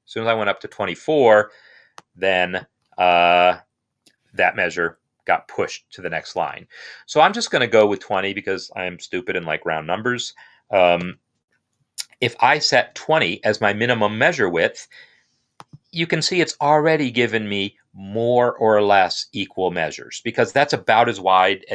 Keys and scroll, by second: 0.8 Up, 6.7 Down, 7.1 Down, 7.7 Down, 11.0 Return.